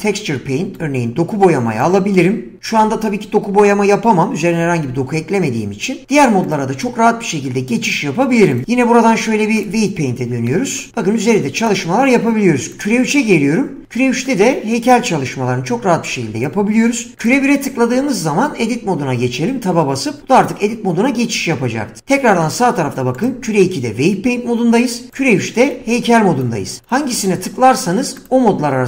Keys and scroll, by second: 17.9 Tab.